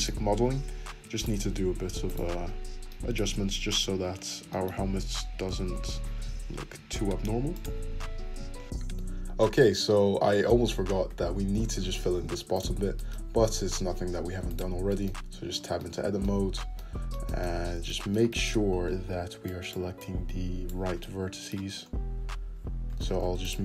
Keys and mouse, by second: 0.3 2, 0.8 1, 1.1 click, 1.2 middle click, 2.1 ctrl+click, 2.2 middle click, 2.3 `, 2.4-3.4 drag, 3.3 `, 3.6-20.3 shift+drag, 4.0 `, 5.6 g, 7.8 Tab, 8.1 `, 10.6 `, 13.4 middle click, 13.4 right click, 14.2 Tab, 15.3 middle click, 15.3 right click, 20.6 click.